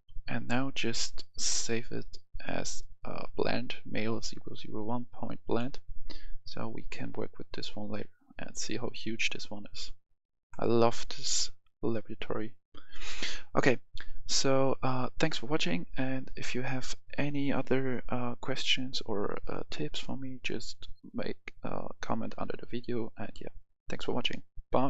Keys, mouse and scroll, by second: 0.0 F10, 0.9 click.